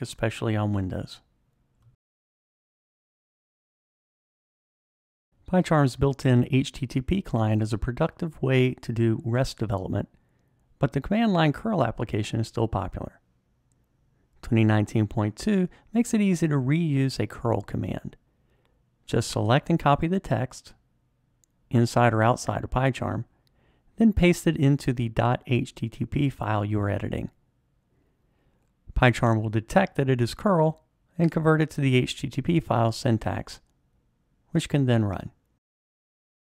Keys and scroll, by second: 23.9 super+v.